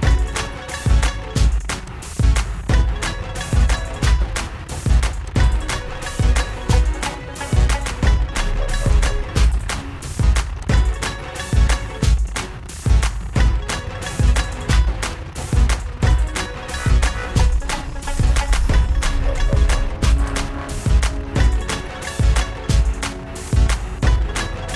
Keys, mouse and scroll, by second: 0.3 click, 0.8 click, 2.9 click, 5.4 click, 6.4 click, 9.1 click, 10.8 click, 12.6 click, 14.6 click, 15.4 click, 18.4 click, 21.4 click, 21.7 ctrl+z, 23.6 click.